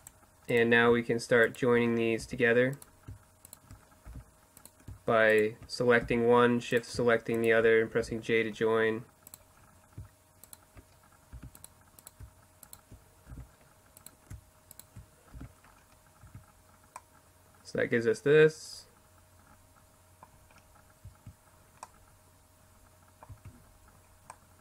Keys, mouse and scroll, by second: 1.3 j, 3.1 j, 5.1 j, 7.1 j, 8.2 middle click, 10.4 j, 12.3 j, 14.4 j, 15.3 Tab, 15.4-16.5 middle drag, 20.1 Tab, 22.3 Tab, 24.0 Tab.